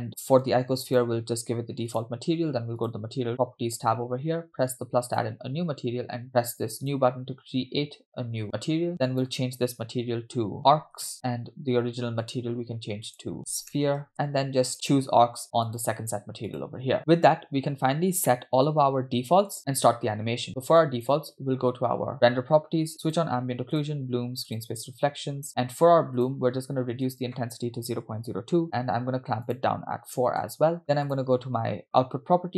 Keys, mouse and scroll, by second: 0.0-0.5 scroll up 3, 1.0-2.2 drag, 2.8 click, 5.1 click, 6.8-7.2 drag, 13.9-16.0 drag, 14.7 e, 16.5 click, 17.2-18.3 scroll down 6, 18.3-19.5 middle drag, 20.8 click, 23.1 click, 23.8 drag, 24.6 click, 26.2 click, 27.1-28.6 drag, 29.5 click, 31.1 click.